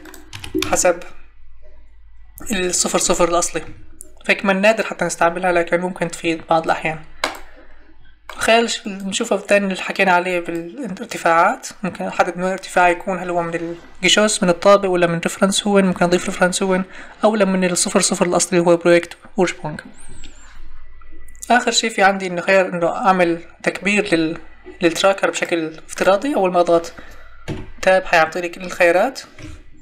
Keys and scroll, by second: 0.3 0, 0.6 Return, 3.6 Escape, 27.5 Tab, 29.4 Escape.